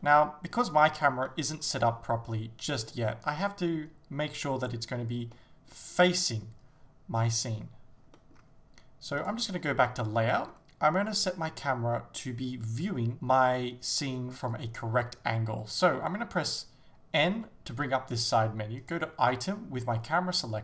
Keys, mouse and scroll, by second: 9.3 click, 9.9-10.6 middle drag, 10.5 scroll down 2, 11.1 right click, 13.1-20.3 middle drag, 17.3 n, 20.3 click.